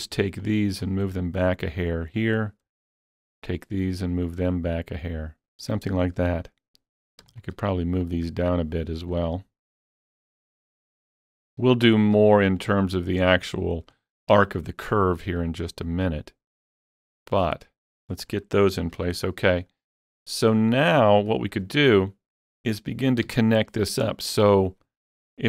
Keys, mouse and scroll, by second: 0.4-7.1 alt+drag, 3.8-6.0 alt+drag, 7.2-14.2 alt+drag, 10.7-11.9 alt+drag, 12.9-14.2 alt+drag, 15.7 alt+click, 18.4-18.9 scroll down 1, 18.9 alt+click, 19.2 alt+a, 19.2-19.7 scroll down 1, 19.7 click, 19.7 middle click, 21.2 shift+middle click, 23.3 KP_3.